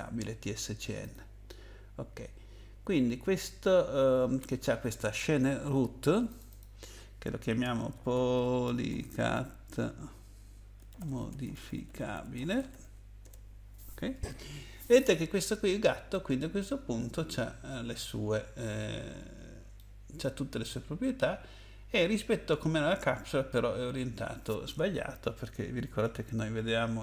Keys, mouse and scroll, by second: 1.0 click, 6.3 click, 6.5 click, 7.9-9.3 typing, 10.7-12.7 typing, 13.2 Return, 16.5-17.7 scroll up 1, 17.7 scroll up 1, 19.2 scroll up 1, 19.8 middle click.